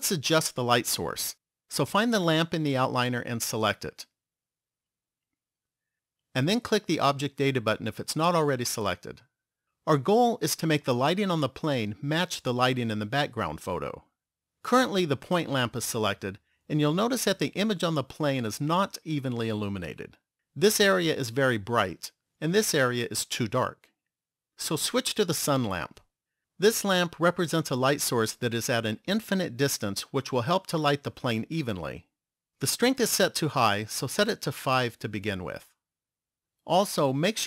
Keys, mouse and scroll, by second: 3.2 click, 5.2 click, 7.3 click, 25.6 click, 34.1 click.